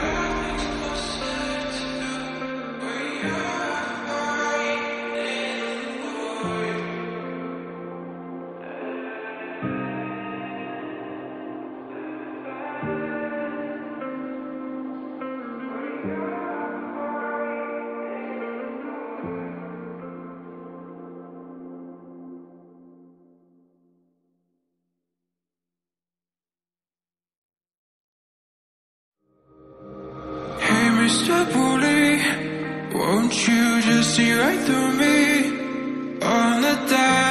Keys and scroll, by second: 0.7 ctrl+z.